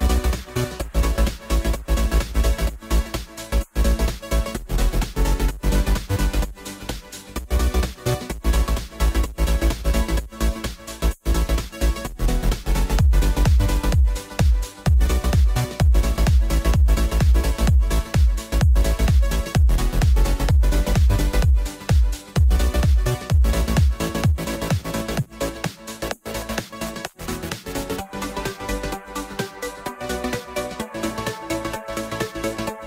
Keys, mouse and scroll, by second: 2.3-6.3 middle drag, 6.3 click, 6.9-12.2 drag, 12.2-13.5 shift+middle drag, 13.5 KP_0, 14.4-15.3 scroll down 5, 15.3-17.4 shift+middle drag, 17.4 scroll up 2, 18.7 shift+click, 19.7 shift+click, 20.3-30.0 drag, 30.8-32.8 drag.